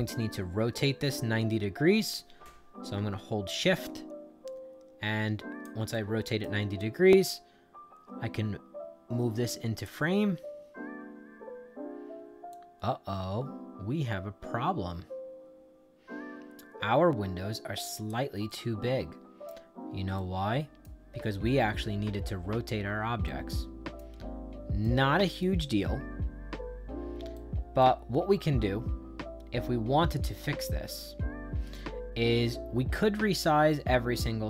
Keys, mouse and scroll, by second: 3.4-5.5 shift+drag, 5.8 right click, 6.7-9.8 drag, 10.7 middle click, 11.4 middle click, 12.4-18.0 drag, 18.4 right click, 20.1 right click, 23.2 right click, 24.7 right click, 27.3 right click, 28.8 middle click, 31.6-34.4 right drag.